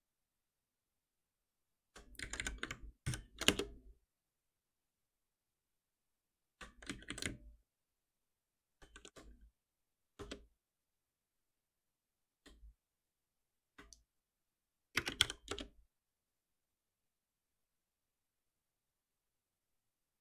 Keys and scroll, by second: 3.0 ctrl+alt+n, 8.7 ctrl+alt+n, 15.5 Return.